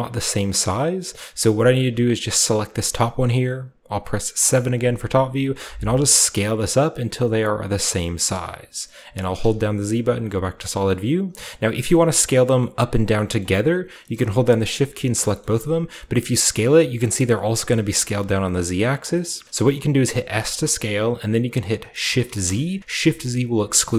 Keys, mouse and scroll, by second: 0.0-0.6 scroll down 1, 1.3 middle click, 1.4-4.4 scroll up 1, 1.9-4.4 right drag, 4.4 KP_7, 5.0-6.0 scroll up 1, 6.0 s, 8.2-9.3 shift+drag, 8.5-9.3 shift+scroll down 1, 9.3-10.7 typing, 10.5-11.4 scroll down 2, 11.4 middle click, 11.4 scroll down 1, 11.5-13.1 scroll up 1, 12.6 middle click, 13.3-14.5 middle drag, 13.5-14.1 scroll up 1, 14.1-15.4 shift+scroll up 1, 14.5 shift+right click, 15.6 s, 18.1 right click, 18.1 typing, 18.9 shift+middle click, 19.0 shift+right click, 19.4-20.0 scroll up 1, 20.0 scroll down 1, 20.0-21.9 middle drag, 20.3 typing, 22.2 typing.